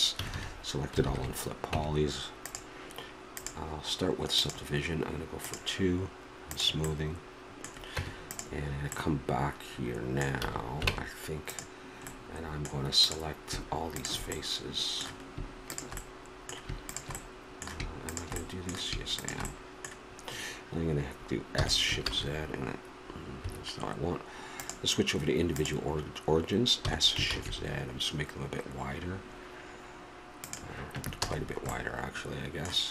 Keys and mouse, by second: 0.1 a, 0.3 a, 1.0 ctrl+n, 1.7 Tab, 5.4-8.3 drag, 7.9 Tab, 10.4 a, 10.9 ctrl+Tab, 13.0-14.1 drag, 15.3 middle click, 21.5 s, 24.6-26.5 drag, 26.8 s, 31.2 a.